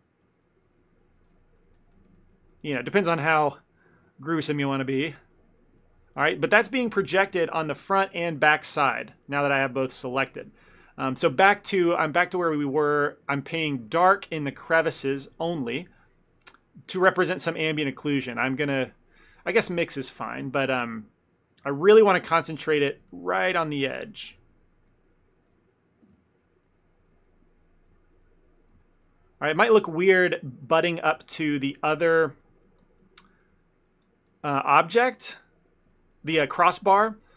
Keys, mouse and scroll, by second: 1.4-2.2 click, 2.0 click, 2.6 click, 2.9 click, 3.2 ctrl+middle click, 3.7 ctrl+middle click, 4.2 click, 4.4 click, 5.0 shift+middle click, 5.1 shift+middle click, 5.4 click, 5.9 ctrl+middle click, 7.0 KP_1, 8.3 middle click, 8.6 middle click, 8.8 ctrl+middle click, 9.5 middle click, 9.8 ctrl+middle click, 9.8 ctrl+middle click, 10.1 middle click, 10.5 shift+middle click, 10.6 shift+middle click, 12.7 click, 14.2 middle click, 14.5 shift+middle click, 14.8 ctrl+middle click, 15.1 ctrl+middle click, 15.3 shift+middle click, 15.4 ctrl+middle click, 15.4 shift+middle click, 15.6 middle click, 15.7 ctrl+middle click, 16.1 middle click, 16.3 shift+middle click, 16.9 click, 17.1 click, 17.5 click, 18.4 click, 19.5 ctrl+middle click, 19.8 shift+f, 20.6 click, 20.9 click, 21.7 ctrl+middle click, 21.9 f, 22.3 click, 22.4 click, 22.9 click, 23.1 click, 23.1 f, 23.4 click, 24.5 shift+f, 25.3 click, 25.6 click, 26.3 ctrl+z, 27.0 ctrl+z, 27.2 click, 27.4 click, 28.3 click, 28.3 middle click, 28.9 shift+middle click, 29.1 middle click, 29.7 click, 29.9 click, 30.5 middle click, 30.7 middle click, 30.9 ctrl+middle click, 31.2 shift+middle click, 31.9 click, 32.1-33.3 click, 33.7 click, 34.0 click, 34.2 click, 34.6 click, 34.7 ctrl+middle click, 34.9 middle click, 35.2 middle click, 35.3 ctrl+middle click, 35.7 middle click, 35.8 ctrl+middle click, 36.0 ctrl+middle click, 36.2 middle click, 37.0 ctrl+middle click, 37.2 middle click.